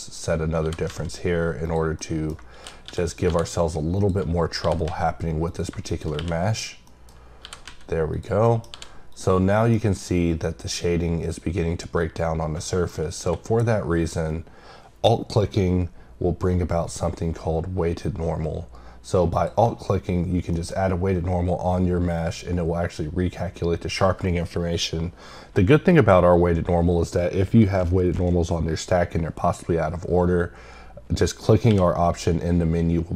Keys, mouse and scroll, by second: 0.4 scroll up 1, 1.6 click, 2.0 middle click, 3.9 click, 4.3-4.6 scroll down 3, 5.5 click, 5.8 click, 6.4 click, 6.8 middle click, 7.1 scroll up 2, 8.1 click, 8.4 middle click, 9.1 click, 9.4 scroll down 1, 9.5 middle click, 12.6 middle click, 19.4 click, 20.5 middle click, 20.7-21.5 scroll down 1.